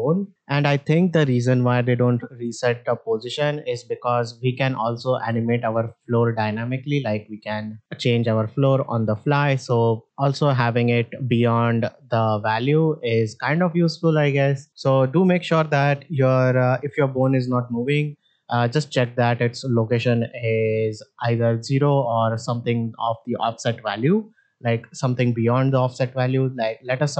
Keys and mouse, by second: 4.0 click, 5.2-12.8 drag, 25.8 click, 26.6 shift+middle drag.